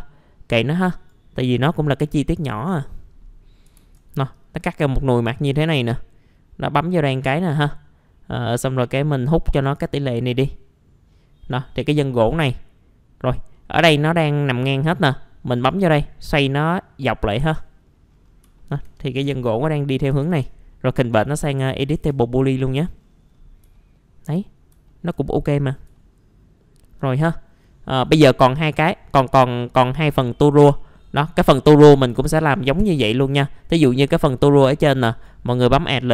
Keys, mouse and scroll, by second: 0.9 click, 3.7 ctrl+a, 4.3 click, 11.1-12.2 middle drag, 12.6-13.2 scroll up 1, 13.2 scroll down 1, 13.5 middle click, 15.5 click, 16.6-17.3 scroll up 1, 17.3 scroll down 1, 17.4 F2, 17.8-18.4 scroll down 1, 18.6 alt+middle click, 19.0 scroll up 1, 20.1 ctrl+shift+g, 20.9 typing, 21.7-22.3 scroll up 1, 22.3 F4, 22.9-23.6 scroll down 1, 23.7 alt+middle click, 24.5 scroll up 1, 24.9 alt+middle click, 25.9 alt+middle click, 27.0 scroll down 1, 27.8 middle click, 28.4 right click, 29.6 click, 30.4-30.7 scroll up 1, 30.7 middle click, 31.7 click, 32.3 F4, 32.8 middle click, 33.2-34.7 scroll up 1, 35.1 click.